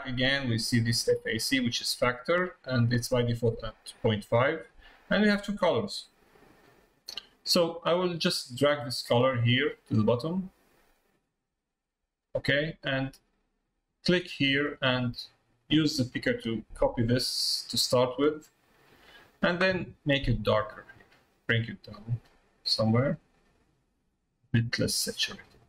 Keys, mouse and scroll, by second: 9.3-10.9 drag, 13.4 click.